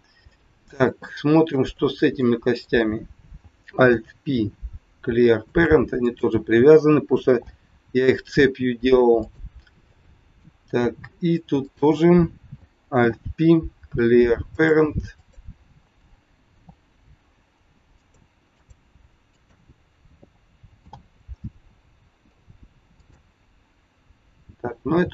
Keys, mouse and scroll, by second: 0.1 middle click, 1.0 shift+middle click, 1.7 middle click, 2.5 click, 3.6 alt+p, 6.0 click, 7.3 alt+p, 9.8 middle click, 10.6 scroll down 2, 11.6 click, 13.0 alt+p, 15.1 click, 16.5 alt+p, 18.5 click, 19.4 click, 20.8 alt+p, 24.8 scroll down 2.